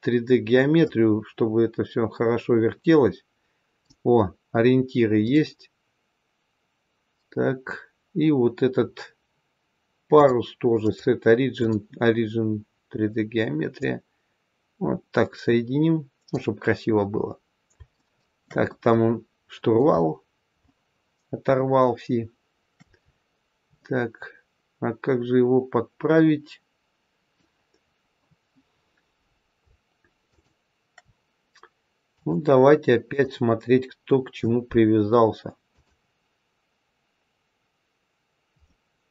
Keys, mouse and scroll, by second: 0.7 click, 5.1 click, 10.1 click, 13.8 click, 17.1-17.7 scroll up 1, 17.9 shift+middle click, 17.9 shift+scroll up 1, 18.7 middle click, 19.8-20.5 scroll up 5, 20.6 shift+middle click, 23.0-23.5 scroll up 1, 23.7 middle click, 27.8-28.6 scroll down 1, 28.6-29.5 scroll down 2, 30.2 shift+click, 32.0 click, 35.6 click, 38.6 middle click.